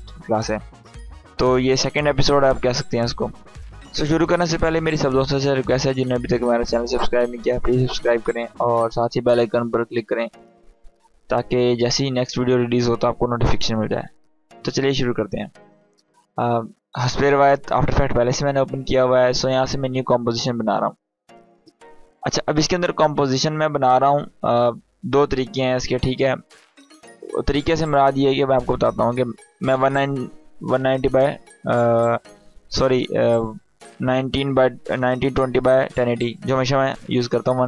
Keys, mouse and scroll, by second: 15.2-22.2 drag, 27.5-31.6 drag, 37.3-37.6 drag.